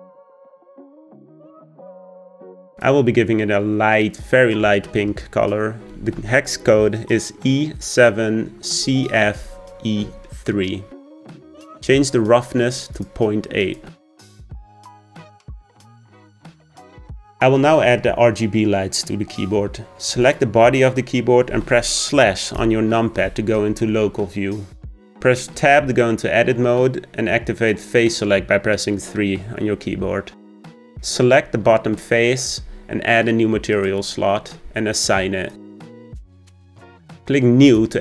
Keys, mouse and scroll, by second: 2.8 click, 13.6-16.7 drag, 20.2 click, 22.6 KP_Divide, 25.6 Tab, 27.7-30.9 drag, 31.1 click, 33.7-38.0 drag.